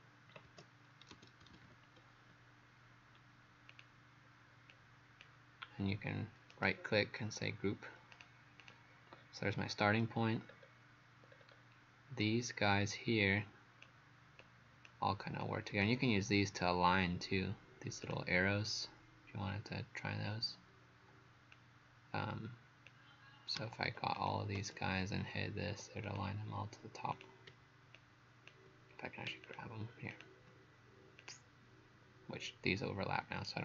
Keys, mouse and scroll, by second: 0.0-2.2 typing, 3.7 click, 6.5 right click, 8.2 click, 8.6 click, 10.5-10.9 scroll down 2, 11.3-11.8 scroll up 3, 12.2 click, 26.1 click, 28.0 shift+click, 30.1 shift+click, 31.2 click.